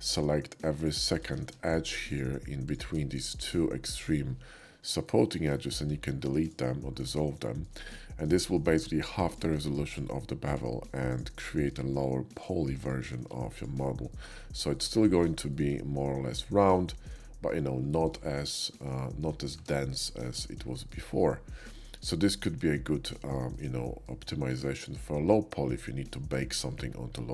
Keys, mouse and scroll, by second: 0.8 shift+click, 1.6 ctrl+shift+z, 1.6-3.0 shift+drag, 5.0 shift+middle click, 5.8 x, 6.4 click, 7.4 shift+middle click, 7.8 shift+middle click, 8.4 shift+middle click, 9.2 shift+click, 10.5 shift+click, 11.4 shift+middle click, 12.4 shift+click, 13.2 x, 13.5 click, 14.1 middle click, 14.8 Tab, 15.3-15.7 middle drag, 17.0-17.5 middle drag, 17.6 shift+middle click, 17.9 middle click, 18.2-18.7 middle drag, 19.0 shift+middle drag, 19.5 Tab, 20.7 shift+middle click, 21.2 shift+middle click, 21.8 shift+middle click, 22.8 shift+middle click, 23.8 shift+middle click, 24.5 shift+middle click.